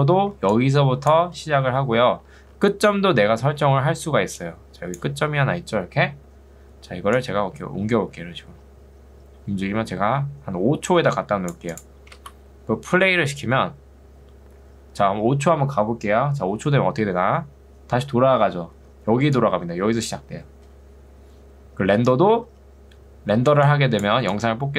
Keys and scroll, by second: 0.4 ctrl+2, 1.8 Escape, 4.0 ctrl+2, 6.2 Escape, 12.2 space, 18.8 ctrl+2, 21.2 Escape, 22.6 ctrl+2.